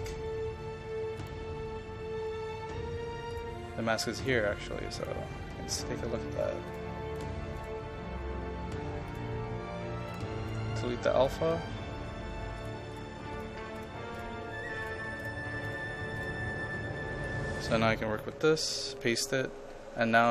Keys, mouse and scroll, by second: 3.3 click, 10.5 right click, 11.3 click, 17.1 ctrl+a, 18.5 ctrl+v, 20.2-20.3 drag.